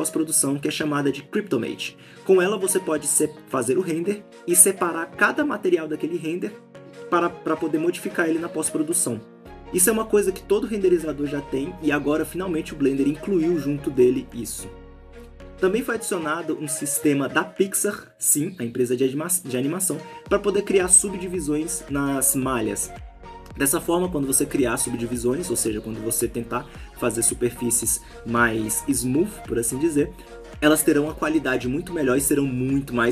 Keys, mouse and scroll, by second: 2.9 ctrl+shift+click, 5.9 ctrl+shift+click, 6.9-7.8 scroll up 1, 7.8-10.9 scroll up 1, 10.9 middle click, 10.9-11.2 scroll up 1, 11.4 ctrl+shift+click, 15.4 ctrl+shift+click, 15.4 ctrl+shift+click, 18.4 middle click.